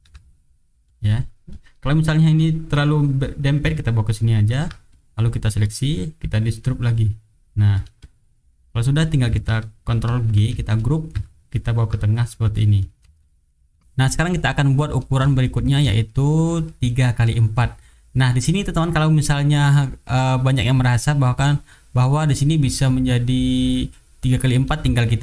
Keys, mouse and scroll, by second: 0.8 click, 1.5 click, 3.4-4.7 ctrl+drag, 4.9 ctrl+click, 6.9 click, 7.7-8.9 drag, 10.1 ctrl+g, 10.7-11.7 ctrl+drag, 12.4 click, 12.8 shift+middle click, 13.1 shift+right click, 13.8 middle click, 14.7 middle click, 15.4 shift+right click, 16.0 shift+click, 16.6 shift+middle click, 17.5 middle click, 17.6 click, 18.2 middle click, 18.7 click, 19.1 middle click, 20.1 click, 20.4 middle click, 21.2 click, 22.1 middle click, 22.3 click, 22.7-24.9 middle drag.